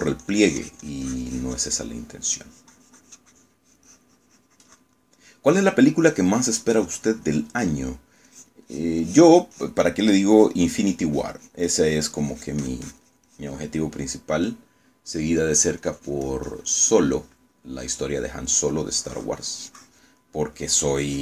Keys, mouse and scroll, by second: 0.2-3.4 drag, 3.0 right click, 3.5-6.1 drag, 6.1 middle click, 6.8 middle click, 7.2-8.7 drag, 8.8 middle click, 9.4-11.0 drag, 11.0 middle click, 11.4-14.7 drag, 14.8-16.6 middle drag, 16.9-19.2 drag, 19.2 middle click, 20.1-21.2 drag.